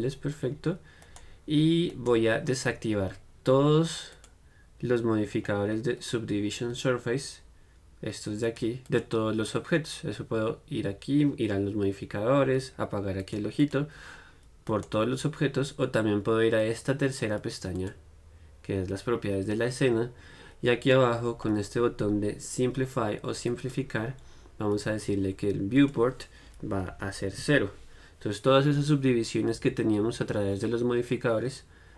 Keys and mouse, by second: 0.0-4.4 middle drag, 4.4-11.0 drag, 13.4-31.9 drag.